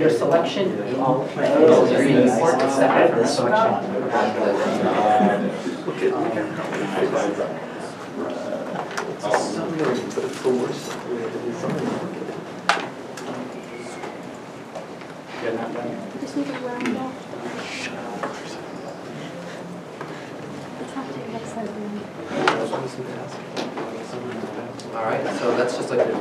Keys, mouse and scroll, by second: 12.6 click, 24.0 a, 24.3 shift+middle click.